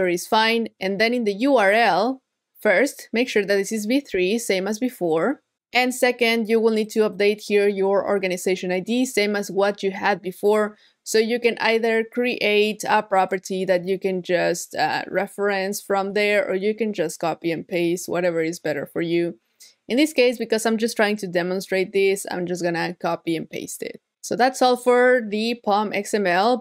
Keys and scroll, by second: 15.2 super+c, 21.5 super+v.